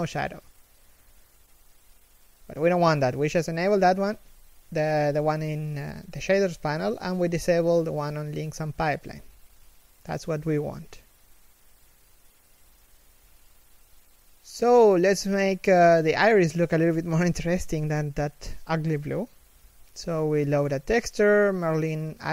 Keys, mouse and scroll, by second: 3.2 scroll down 1, 3.4 x, 3.6 z, 3.9 right click, 4.0 x, 4.1 z, 4.2 scroll up 1, 4.5 right click.